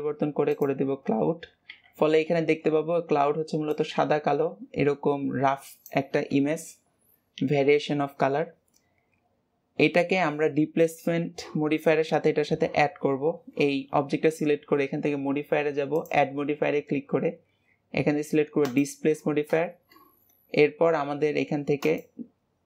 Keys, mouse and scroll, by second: 10.7 click, 15.9-18.9 drag, 21.7-22.6 drag.